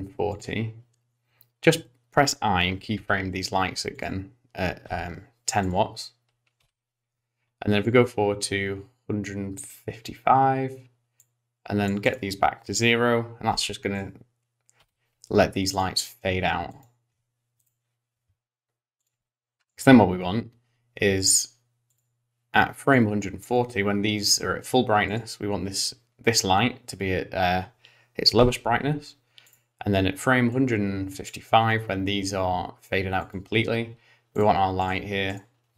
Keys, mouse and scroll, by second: 0.3 click, 3.0 i, 4.0 click, 4.9 i, 5.7 click, 6.6 i, 7.9 click, 11.3 click, 12.1 click, 14.9 i, 15.8 click, 16.8 click, 17.6 click, 19.0 click, 19.7 click, 19.7 i, 21.9 click, 23.0 click, 25.1 click, 28.5 i, 29.5 click, 30.6 click, 33.3 click, 34.4 click, 35.3 click.